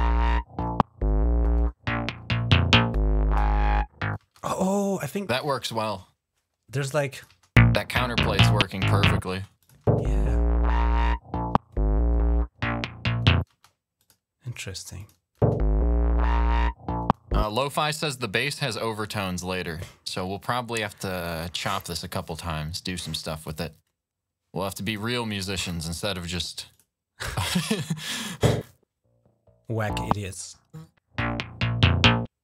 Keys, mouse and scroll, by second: 2.7 click, 4.0 space, 6.6 click, 7.2 space, 9.1 space, 9.4 click, 9.6 space, 13.3 space, 13.8 click, 14.8 click, 15.2 space, 17.3 space, 17.6 click, 17.8 click, 20.1-20.5 scroll down 2, 24.6 click, 26.5 click, 27.8 click, 28.1 click, 28.2 space.